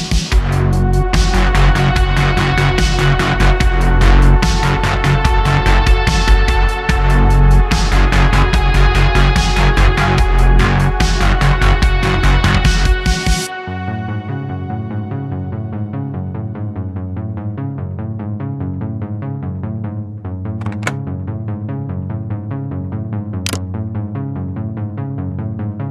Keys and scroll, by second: 0.5 shift+Caps_Lock, 1.0 a, 2.6 s, 4.2 s, 4.7 ., 7.4 s, 7.8 s, 11.3 q, 12.5 d, 13.0 x, 15.6 ,, 16.0 s, 20.8 Tab, 22.2 Tab, 22.7 Tab, 23.0 2, 23.6 super+b, 24.8 Tab, 25.1 q.